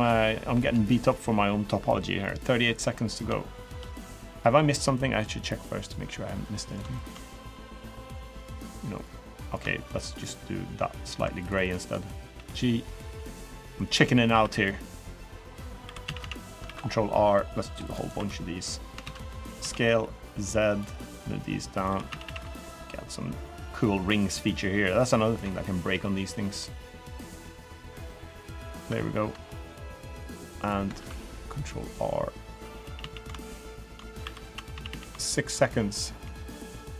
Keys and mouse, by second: 0.6 shift+middle click, 1.9-2.9 middle drag, 3.2 shift+middle click, 4.1 middle click, 4.9 middle click, 6.2 middle click, 6.7 shift+middle click, 7.4 middle click, 9.6 shift+click, 10.0 shift+click, 10.8 click, 11.2 shift+click, 12.1 g, 13.2 click, 13.5 middle click, 14.1 ctrl+r, 15.6 3, 15.8 a, 15.9 a, 16.4 ctrl+r, 17.9 3, 18.8 ctrl+z, 19.3 s, 21.2 click, 21.6 3, 22.0 a, 22.5 alt+shift+click, 23.2 alt+shift+click, 25.6 g, 27.5 click, 28.0 middle click, 29.7 middle click, 30.7 ctrl+r, 32.6 a, 32.7 a, 33.2 alt+shift+click, 34.0 3, 34.5 a, 34.6 a, 35.0 alt+click, 36.0 g.